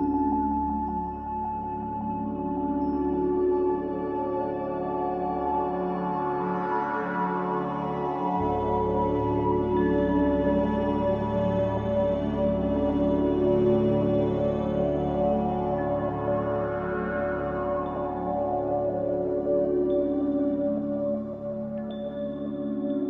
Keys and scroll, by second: 3.1 ctrl+z.